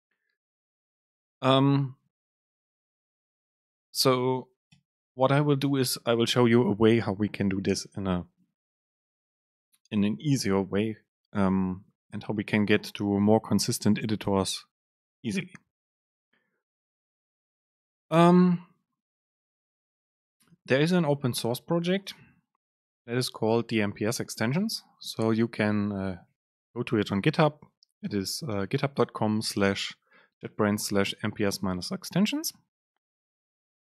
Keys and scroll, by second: 3.4 BackSpace.